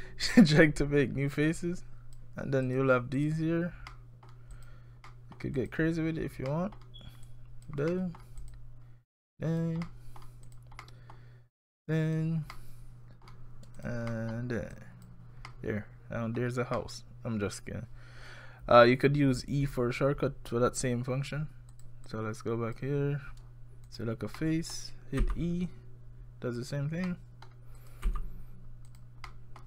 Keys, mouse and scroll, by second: 0.5 click, 2.7 click, 3.2 click, 3.9 middle click, 4.5 click, 5.1 middle click, 5.6 click, 6.5 middle click, 7.3 click, 7.9 middle click, 8.4 click, 9.1 click, 9.9 middle click, 10.5 click, 10.8 middle click, 11.7 click, 12.5 middle click, 13.8 click, 14.1 middle click, 14.7 click, 15.5 middle click, 16.8 middle click, 21.7 click, 22.1 click, 23.9 click, 24.4 middle click, 25.2 e, 27.1 middle click, 27.8 click, 28.1 e, 29.3 middle click.